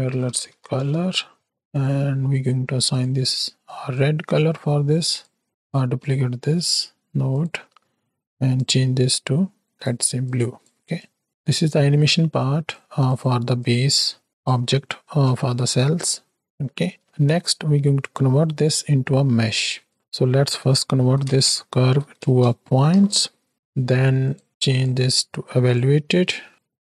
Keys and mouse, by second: 5.5 click, 6.0 shift+d, 10.9 click, 11.8-12.7 right drag, 13.0 drag, 13.5 click, 15.4 ctrl+space, 16.0 click, 16.7 click, 17.0 shift+a, 19.8-24.3 drag, 24.8-25.8 drag, 26.1 click.